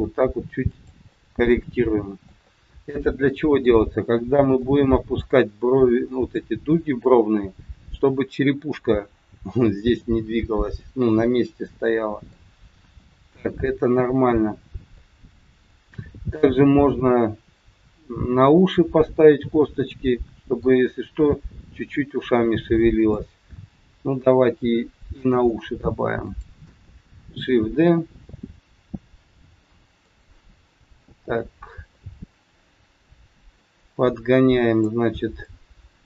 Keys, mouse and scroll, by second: 1.1 middle click, 2.3 middle click, 5.6 middle click, 5.6-6.0 scroll up 3, 5.9 middle click, 7.4 scroll down 2, 10.3 middle click, 11.6 middle click, 12.7 KP_1, 13.6-14.1 scroll down 3, 15.0 middle click, 18.4 middle click, 22.3 middle click, 23.4 KP_1, 24.6 middle click, 26.2 click, 27.8 shift+d, 31.9 middle click, 34.1 click, 35.3 click.